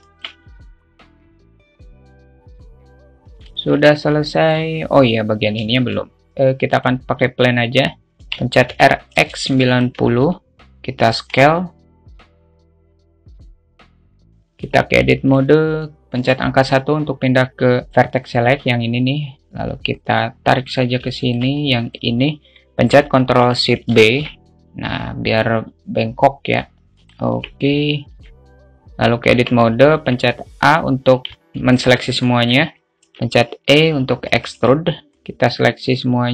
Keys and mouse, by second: 0.3 shift+middle click, 0.3 shift+a, 0.7 alt+z, 0.7 click, 1.0 alt+z, 1.5 click, 2.5 click, 3.9 shift+middle click, 4.5 shift+middle click, 6.1 shift+a, 8.5 r, 10.5 s, 12.5-14.4 drag, 15.0 Tab, 15.4 alt+shift+middle click, 16.5 1, 19.4 click, 20.3 click, 21.4 alt+shift+middle click, 21.9 click, 24.3 ctrl+shift+b, 27.7 Tab, 28.1-28.6 alt+middle drag, 29.5 Tab, 30.2 a, 31.7 alt+middle click, 32.5 middle click, 33.7 e, 34.9 `, 35.3 a, 35.9-36.3 drag.